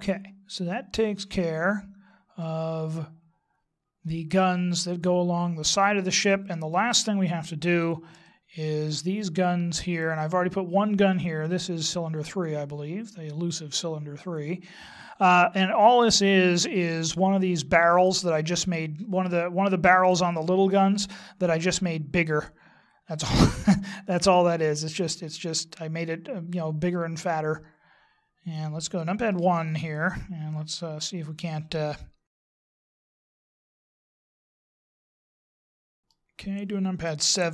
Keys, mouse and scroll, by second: 2.4 middle click, 6.4-8.2 scroll up 3, 8.2 shift+middle click, 9.2-10.1 scroll up 3, 12.6 right click, 25.2 click, 29.3 KP_1, 30.4-32.3 scroll up 3, 32.3 shift+middle click, 32.5 middle click, 33.0 scroll up 2, 33.4 shift+middle click, 33.6 middle click, 34.6 click, 35.5 middle click, 37.0 KP_7.